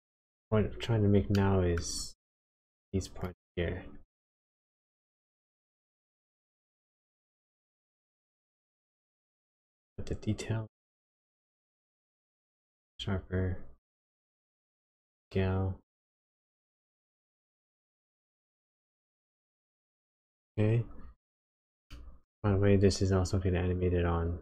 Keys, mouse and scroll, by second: 0.8-1.3 scroll down 2, 1.3 shift+middle click, 4.1 shift+middle click, 5.0 scroll up 3, 5.6 shift+scroll down 1, 5.8 shift+middle click, 8.1 click, 10.6 shift+click, 13.8 shift+click, 19.5 middle click, 21.8 middle click, 23.1 shift+click.